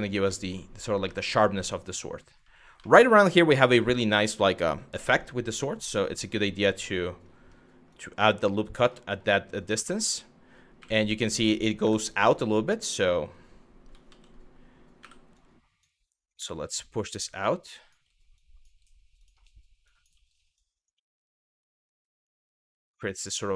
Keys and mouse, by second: 0.0 shift+middle click, 0.8 shift+middle click, 2.5 shift+middle click, 7.5 click, 10.4 q, 11.0 click, 11.4 1, 11.9 click, 13.7 ctrl+z, 14.6 w, 15.1 click, 16.2 g, 17.0 click, 17.4 click, 17.5 g, 18.0 click, 18.8 click, 19.6 click, 20.2 click, 21.2 click, 21.6 click, 21.7 g, 22.2 click.